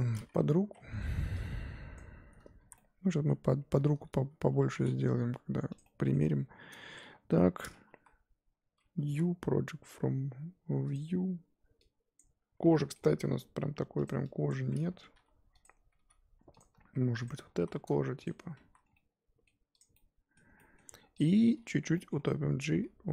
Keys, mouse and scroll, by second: 0.6 z, 1.0 scroll up 1, 1.9 click, 2.7 z, 2.7 middle click, 3.1 z, 3.5-4.7 middle drag, 4.7 g, 5.8 middle click, 6.2 Tab, 6.8 Tab, 7.0 a, 7.9 KP_1, 10.9 u, 12.1 click, 13.1 g, 14.5 click, 15.1 s, 16.0 g, 16.7 s, 17.5 s, 18.3 Tab, 18.7 z, 18.8 scroll down 2, 18.9 middle click, 19.8 click, 19.9 middle click, 20.8-21.2 scroll up 1, 21.2 click, 21.9 middle click, 22.7 g.